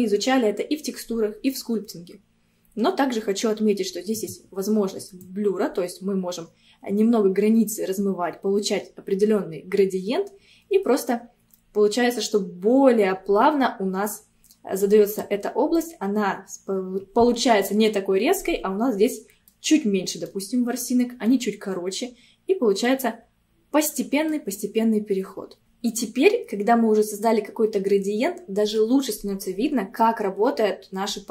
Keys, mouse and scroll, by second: 4.2-8.3 drag, 15.8-18.8 middle drag, 18.8-19.2 scroll up 1, 19.2-24.4 middle drag.